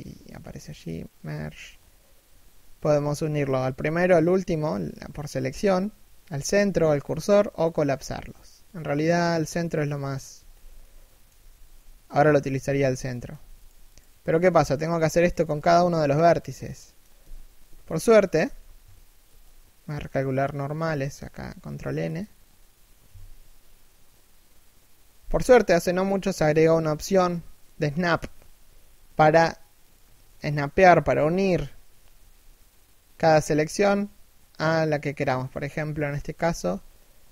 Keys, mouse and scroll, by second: 10.0 z, 10.4 middle click, 11.0 z, 12.0 z, 12.6 middle click, 13.0 z, 13.2 right click, 13.5 shift+right click, 14.5 alt+m, 15.3 z, 15.7 middle click, 16.9 z, 17.6 middle click, 18.1 a, 18.8 ctrl+n, 21.3 ctrl+n, 29.5 right click, 29.8 middle click, 31.7 g.